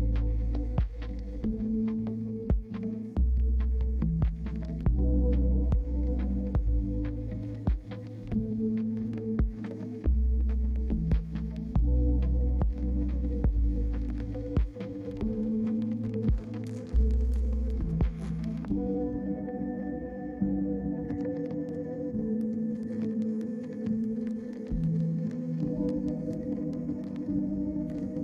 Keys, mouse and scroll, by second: 12.5 click, 12.6 double click, 13.6-14.5 typing, 18.4 middle click, 19.9 right click, 21.0 middle click.